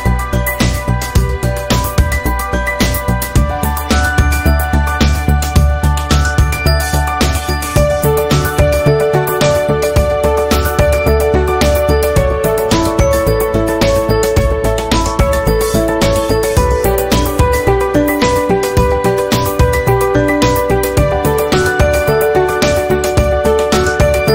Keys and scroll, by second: 0.9 Down, 1.7 Up, 2.4 v, 8.0 ctrl+z, 20.1 p, 23.5 ctrl+z.